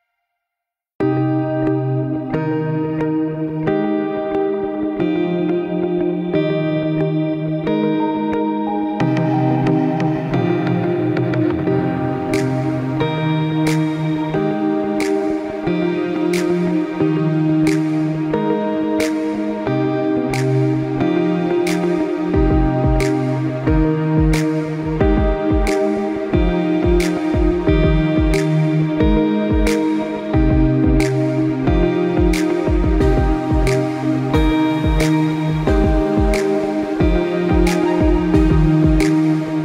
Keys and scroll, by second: 36.8 ctrl+shift+z.